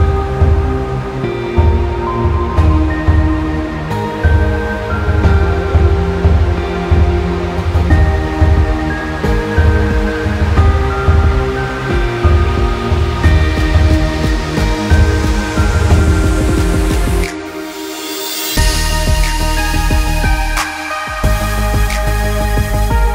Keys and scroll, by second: 17.7 ctrl+z.